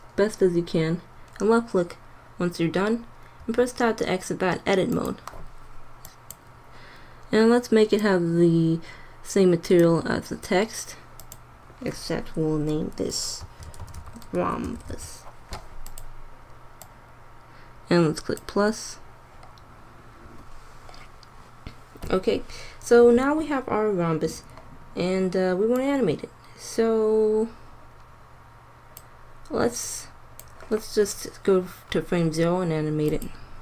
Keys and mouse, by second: 1.2-3.3 drag, 3.3 Tab, 11.1-13.0 drag, 16.7-18.7 drag, 21.8-23.6 drag, 25.7-26.7 drag, 31.3 click, 33.0-33.6 drag.